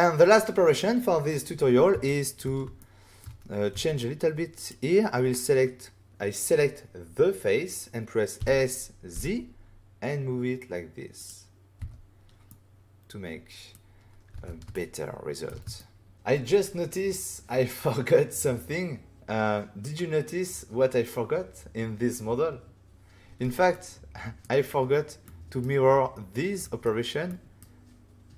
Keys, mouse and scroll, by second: 2.0 shift+middle click, 2.3 middle click, 2.7 ctrl+middle click, 3.7 Tab, 4.5 click, 8.3 s, 9.1 z, 11.1 click, 11.7 Tab, 12.4 middle click, 14.3 alt+a, 14.7 ctrl+middle click, 15.4 middle click, 15.7 shift+middle click, 16.1 click, 23.7 middle click, 25.2 middle click, 26.6 middle click, 27.2 middle click.